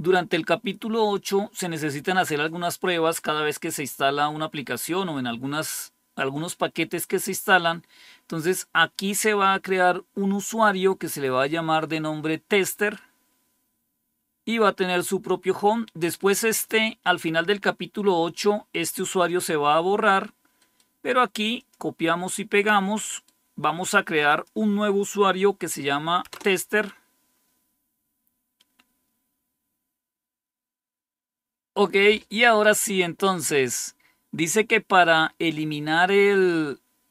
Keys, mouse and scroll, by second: 14.8-20.5 drag, 20.5 right click, 21.5-22.9 drag, 22.9-24.2 right drag, 24.2-25.2 drag, 26.2 Return, 30.3-37.0 scroll down 1.